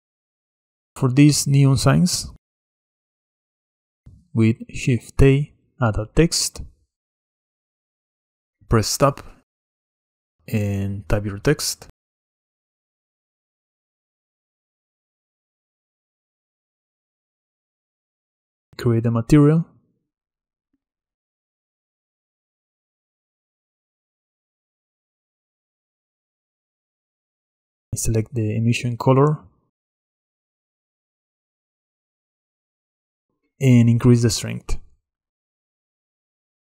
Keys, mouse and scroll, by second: 0.0-1.4 shift+middle drag, 1.4 click, 2.6-4.0 middle drag, 4.0-5.2 scroll up 8, 4.2-4.5 shift+middle drag, 7.8 shift+a, 8.1-8.5 shift+middle drag, 8.5-9.0 scroll up 4, 9.0 Tab, 10.1-13.3 typing, 10.9 middle click, 14.2 Tab, 19.1-23.4 drag, 23.4-28.4 middle drag, 28.4 click, 31.4 shift+middle click, 31.6 scroll up 9, 32.4-34.3 scroll up 1, 34.3-36.6 drag.